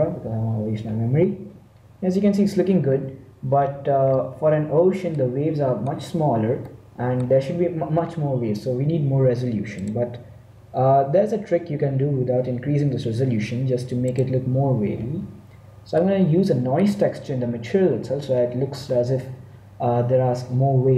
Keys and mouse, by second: 0.5-2.0 drag, 3.8-6.2 middle drag, 8.7-10.2 middle drag, 10.2-12.2 drag, 12.2-14.8 middle drag, 14.8-16.3 drag.